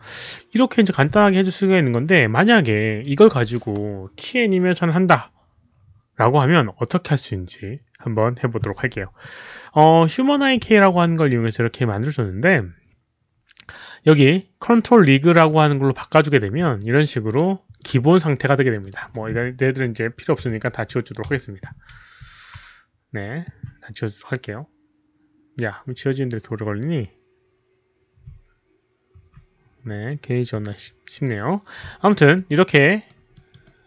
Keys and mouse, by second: 0.7 click, 2.0 click, 2.6 click, 5.2 click, 11.4 click, 12.3 click, 15.4 click, 16.7-17.7 alt+drag, 18.7 alt+click, 20.6 Delete, 20.6 alt+drag, 20.8 Delete, 21.8 Delete, 21.8 click, 26.2 Delete, 26.2 alt+click, 32.3 alt+click, 32.7 alt+right click, 33.3 alt+click, 33.6 alt+right click.